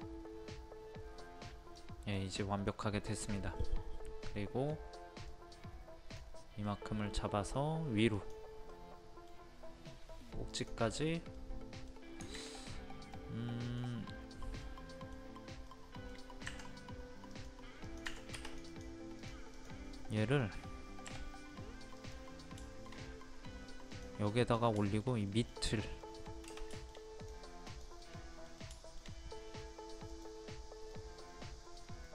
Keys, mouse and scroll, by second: 1.7 scroll down 1, 2.1 middle click, 5.3 click, 6.6 middle click, 8.1 click, 8.7-9.7 middle drag, 10.5 click, 11.4 middle click, 13.1-16.5 middle drag, 16.5 Escape, 17.3 click, 18.0 Escape, 18.4 click, 19.9 middle click, 20.4-21.1 scroll up 1, 22.0 click, 22.6-23.7 shift+middle drag, 23.9 click, 24.2 scroll down 1, 24.3 scroll up 1, 24.5 scroll down 1, 24.8 shift+middle click, 27.2 click, 28.1-29.8 middle drag, 30.1 click.